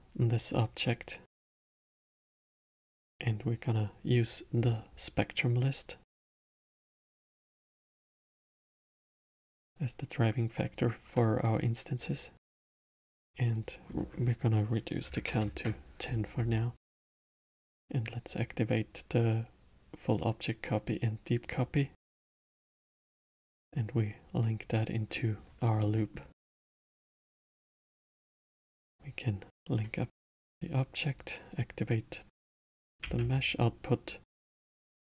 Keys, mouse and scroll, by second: 1.6-3.3 drag, 8.0 click, 9.4 click, 11.9-16.6 drag, 20.0 click, 21.4 click, 22.3-23.6 middle drag, 23.6 click, 25.8-28.9 middle drag, 28.9 drag, 30.3 middle click, 31.1 click, 33.0 shift+a.